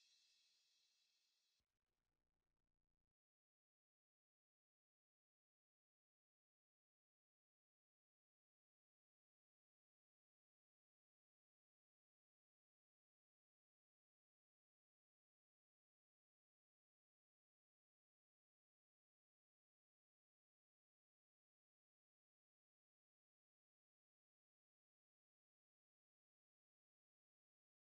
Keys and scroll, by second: 3.0 ctrl+0.